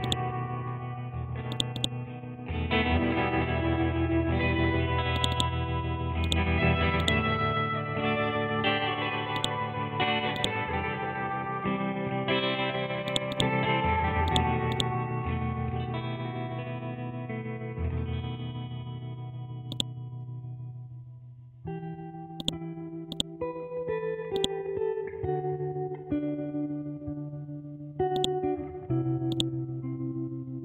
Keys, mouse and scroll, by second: 1.7 right click, 2.7 F12, 2.9 Tab, 5.1 click, 5.3 right click, 6.2 click, 8.4 ctrl+z, 9.3 click, 11.3 F12, 11.5 Tab, 13.1 click, 13.3 right click, 14.2 click, 15.0 scroll down 1, 17.7 scroll up 1, 17.9-18.9 scroll down 1, 18.9-19.7 scroll up 1, 19.7 click, 20.9-22.4 scroll up 1, 22.4 click, 23.4-23.8 scroll down 1, 24.3 click, 25.3 scroll up 1, 25.5 Up, 27.2-28.1 scroll down 1, 28.1-30.1 drag, 30.1 scroll up 1.